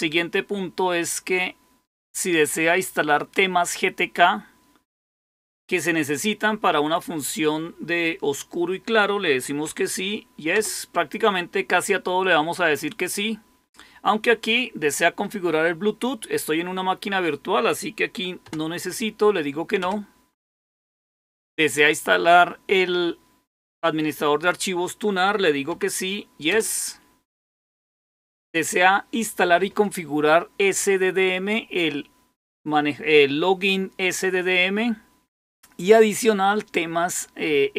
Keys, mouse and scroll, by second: 10.4 Return, 19.7 Return, 26.4 Return.